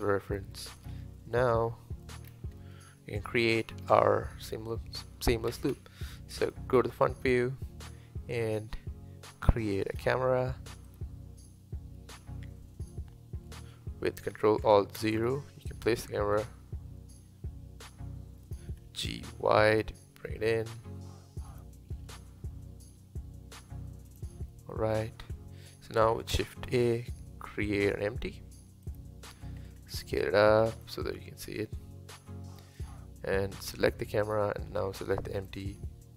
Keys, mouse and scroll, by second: 0.0-0.3 scroll up 2, 0.3-0.8 shift+middle drag, 0.8 click, 1.2-2.3 middle drag, 2.3-2.6 scroll down 2, 2.6-5.6 middle drag, 5.7 KP_1, 7.2 shift+a, 15.0 ctrl+alt+KP_0, 16.4 g, 18.9 g, 22.0 g, 24.5-24.9 middle drag, 24.9-25.2 scroll down 3, 25.2-26.7 middle drag, 26.7 shift+a, 29.9 s, 31.1-33.7 middle drag, 33.7 click, 34.2 click, 35.4 shift+click.